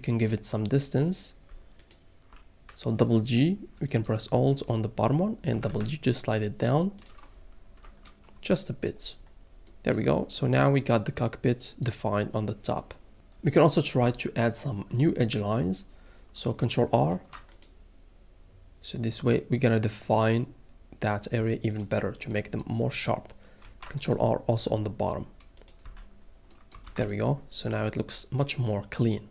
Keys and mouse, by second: 5.5 g, 5.7 g, 7.0 click, 7.3 alt+middle click, 8.3 Tab, 14.0 Tab, 14.2 middle click, 15.9 middle click, 17.1 ctrl+r, 17.5 click, 21.7 click, 23.6 ctrl+r, 24.0 click, 25.6 click, 25.8 Tab, 26.8 alt+a.